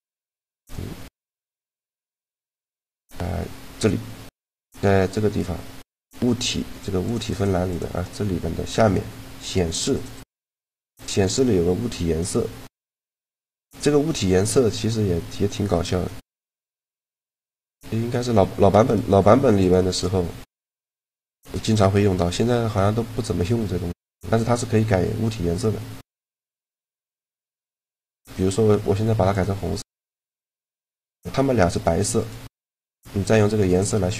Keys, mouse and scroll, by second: 0.3 right click, 1.0 middle click, 1.7-3.3 drag, 1.7 right click, 2.4-6.8 middle drag, 6.8-12.3 drag, 13.9 middle click, 16.8-18.7 middle drag, 18.7-20.0 right drag, 20.0-22.4 middle drag, 23.1-24.8 right drag, 26.0-27.6 right drag, 26.8 click, 27.6 middle click, 28.0 click, 29.7-30.8 middle drag, 30.8-33.7 right drag, 32.5 shift+g.